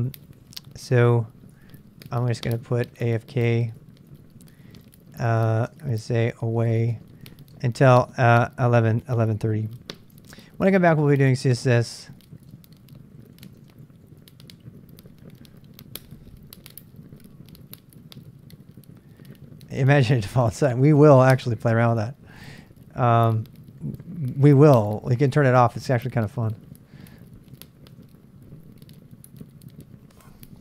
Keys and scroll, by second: 2.1 ctrl+[, 2.2 k, 4.1 ctrl+c, 4.4-8.0 typing, 9.5-14.3 typing, 22.5 ctrl+[, 22.5-25.8 typing, 24.5 ctrl+[, 27.9 Return, 30.1-30.6 typing.